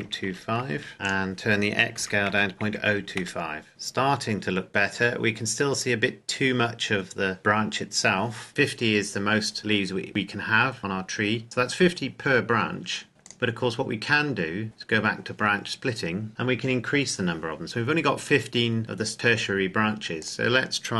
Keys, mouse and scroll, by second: 0.0 KP_2, 0.2 KP_5, 0.7 KP_Enter, 0.9 scroll down 1, 1.0 click, 1.9 KP_Decimal, 2.2 KP_0, 2.6 KP_2, 2.8 KP_5, 3.1 KP_Enter, 3.7-5.7 scroll down 1, 5.8-7.1 scroll up 1, 7.1-8.1 scroll down 1, 9.6-10.3 scroll down 1, 10.3-11.4 scroll up 1, 13.2 click, 18.5-19.6 scroll down 1, 20.2 click.